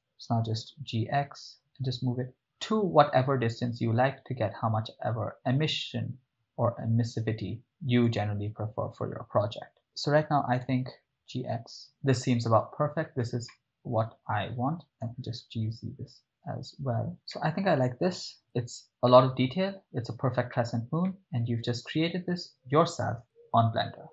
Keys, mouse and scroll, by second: 0.7 x, 7.9 click, 10.6 g, 11.3 x, 11.8 click, 13.6-14.5 ctrl+middle drag, 15.0 g, 15.4 z, 17.2 click, 17.3-18.3 ctrl+middle drag, 18.4 shift+middle drag, 19.2-20.8 ctrl+shift+middle drag, 21.1-21.9 ctrl+middle drag.